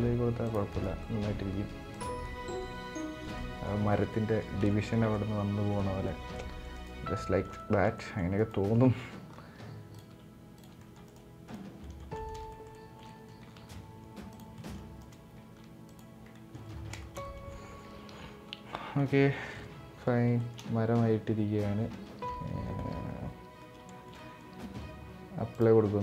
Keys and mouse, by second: 0.4 right click, 0.7 middle click, 1.1 ctrl+a, 1.9-2.3 middle drag, 2.7 middle click, 3.1 middle click, 3.8-4.1 middle drag, 4.3 shift+middle drag, 4.8-5.4 middle drag, 5.8-6.3 middle drag, 6.5 right click, 6.9 middle drag, 7.3 shift+middle click, 7.7 middle click, 8.1 right click, 9.0 e, 9.8 e, 10.5 middle click, 10.8 right click, 11.5 middle click, 12.0 middle click, 12.2-12.7 shift+middle drag, 12.8 middle drag, 13.3 ctrl+a, 14.3 middle click, 14.7 right click, 15.1 ctrl+a, 16.0 middle click, 16.7 shift+middle drag, 17.0 middle click, 17.8 z, 18.7 middle drag, 19.3 middle click, 20.1 shift+middle click, 21.9 Tab, 22.4-23.3 middle drag, 23.6 shift+middle click, 23.9 middle click, 25.7 middle drag.